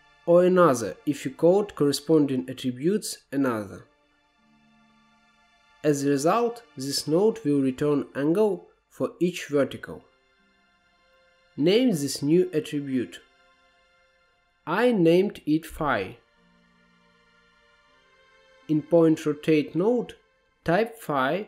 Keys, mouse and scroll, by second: 0.0-5.5 drag, 5.8-12.3 drag, 13.8 click, 20.9-21.4 drag.